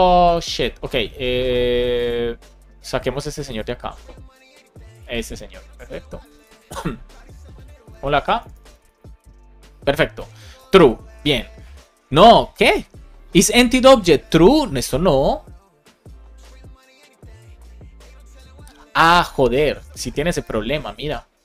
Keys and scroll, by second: 6.3 super+c, 8.0 super+Left, 8.3 Return, 8.7 Up, 9.0 super+v.